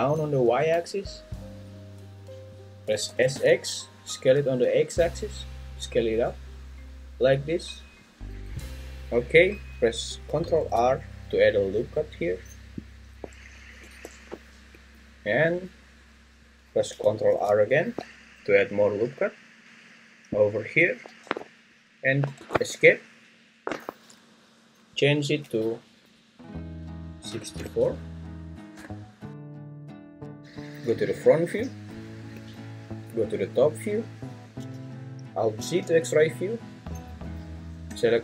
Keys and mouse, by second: 3.1 s, 3.3 x, 8.0 click, 10.6 ctrl+r, 13.8 Escape, 17.3 ctrl+r, 22.4 Escape, 24.9-29.3 drag, 29.9 `, 32.3 `, 33.1 `, 35.6 alt+z, 37.9-38.2 drag.